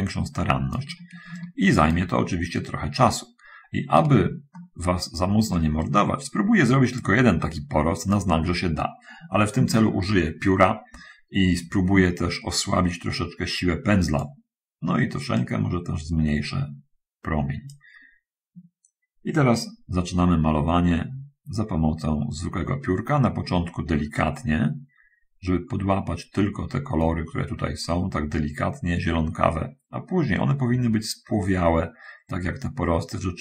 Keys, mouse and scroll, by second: 0.0-1.2 drag, 1.5 shift+click, 2.9-4.5 drag, 4.5-5.9 shift+middle drag, 5.9-8.6 right drag, 12.9-14.7 drag, 15.7-18.0 drag, 20.9-33.4 drag.